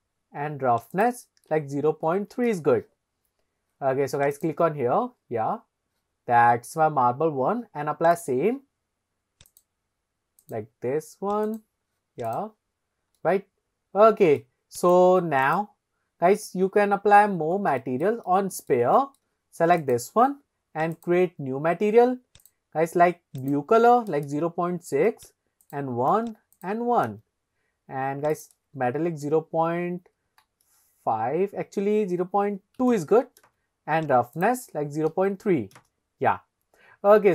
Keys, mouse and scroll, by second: 0.9-2.6 drag, 4.4 click, 5.0-6.7 scroll up 5, 8.2 click, 9.5-11.7 drag, 12.3 click, 12.9-13.2 scroll up 1, 13.2-14.5 middle drag, 14.8 click, 16.8-17.4 scroll down 3, 17.9 shift+middle drag, 18.5 middle click, 19.1 shift+middle click, 19.9 click, 21.0-21.3 drag, 22.4 click, 28.3-34.0 drag, 34.4-36.0 drag.